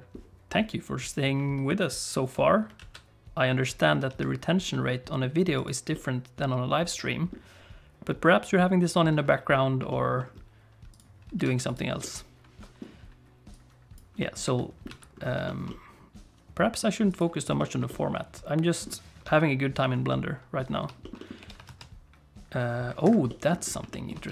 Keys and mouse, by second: 2.8 alt+a, 4.1 alt+a, 4.7 middle click, 5.5 click, 5.9-7.3 middle drag, 9.9 shift+middle click, 11.4 alt+a, 11.6 click, 12.0 middle click, 13.5 click, 14.2 middle click, 14.9 alt+a, 15.4 shift+middle click, 15.7-16.8 middle drag, 17.6 shift+middle click, 17.9 middle click, 19.3 KP_7, 20.1 middle click, 21.0 click, 21.2 middle click, 21.4 g, 23.3 middle click, 23.9 click.